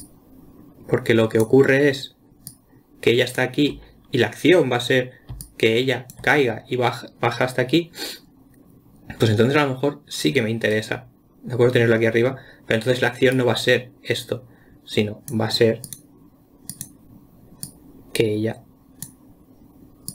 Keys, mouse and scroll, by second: 0.4 click, 2.9 click, 5.7 d, 5.8 click, 6.5 d, 6.6 d, 13.8-16.4 drag, 17.1 click, 18.1-20.1 drag.